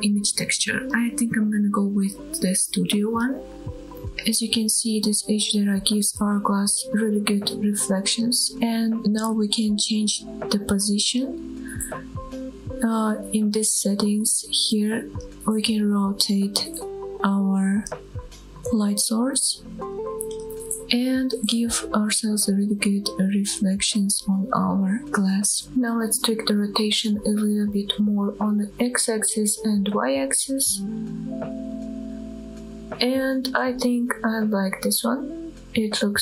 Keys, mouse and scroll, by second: 8.1 scroll down 1, 8.5-8.8 scroll up 2, 8.8-9.1 scroll down 1, 9.4 middle click, 9.9 middle click, 10.5-11.7 scroll up 6, 11.4 shift+middle click, 13.7-19.1 drag, 20.3-24.2 scroll up 3, 24.2-25.4 scroll down 2, 25.4-25.8 scroll down 2, 25.6 shift+middle click, 25.6 scroll up 1, 25.8-29.4 drag, 30.8-34.0 drag.